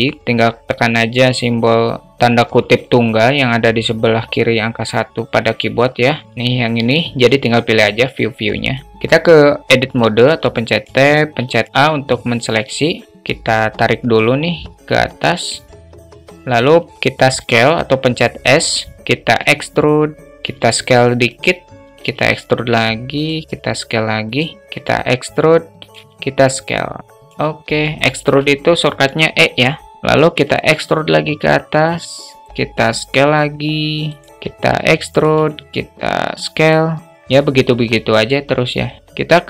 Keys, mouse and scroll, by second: 9.4 Tab, 10.1 alt+shift+middle click, 10.8 a, 13.7-16.3 drag, 16.9 s, 18.9 e, 20.3 s, 21.3 e, 22.8 s, 24.2 e, 25.3 s, 27.5 alt+shift+middle click, 29.8 alt+shift+middle click, 30.0 e, 32.5 s, 34.0 alt+shift+middle click, 34.2 e, 34.9 s, 36.9 e, 38.2 e.